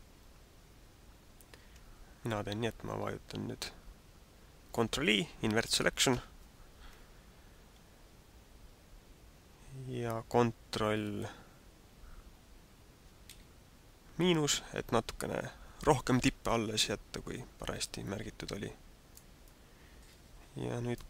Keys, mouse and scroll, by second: 6.2 ctrl+i, 13.2 ctrl+KP_Subtract, 18.1 middle click, 19.4 middle click.